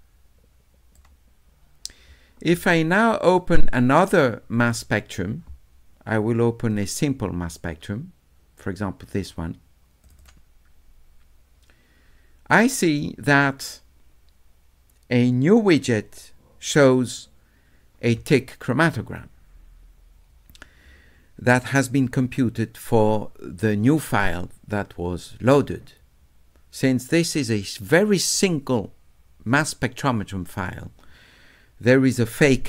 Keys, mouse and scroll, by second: 3.3 click, 4.6 click, 6.7 click, 10.0 click, 10.2 click, 26.6 middle click.